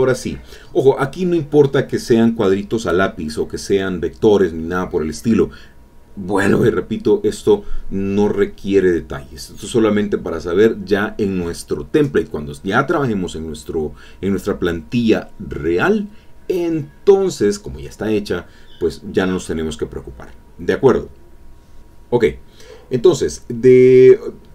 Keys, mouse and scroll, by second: 2.0-3.4 shift+drag, 4.1 click, 6.0 click, 6.9-13.3 drag, 16.4 click, 17.1-18.4 middle drag, 17.1-17.6 scroll down 1, 17.6 ctrl+scroll up 1, 17.6 ctrl+scroll down 1, 18.5 ctrl+middle click, 18.5-18.8 ctrl+scroll down 1, 18.8 click, 19.1 click, 19.9 alt+Tab, 21.5 click.